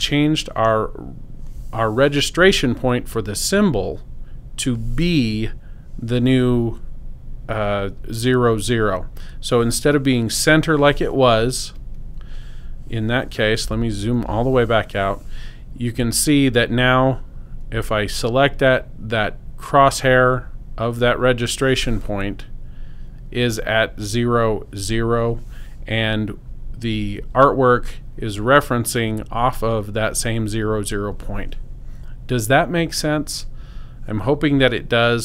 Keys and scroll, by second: 13.8 super+0.